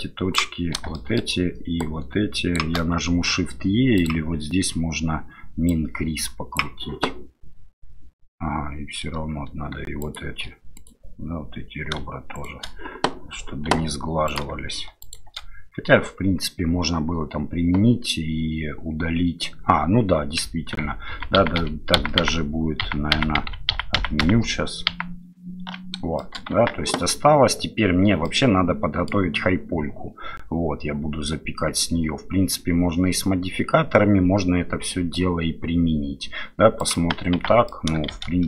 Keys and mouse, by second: 0.0 click, 0.9 shift+middle click, 3.9-6.6 drag, 10.0 shift+click, 10.7 click, 12.3 shift+click, 13.7 2, 14.3 click, 15.0 shift+click, 20.8 ctrl+z, 21.6 ctrl+z, 22.0 ctrl+z, 22.2 ctrl+z, 22.9 ctrl+z, 23.1 ctrl+z, 23.4 ctrl+z, 23.6-25.7 ctrl+z, 26.2 shift+click, 26.5 Tab, 28.2-29.1 drag, 36.8 middle click, 37.3 Tab, 37.7 middle click, 38.1 shift+z.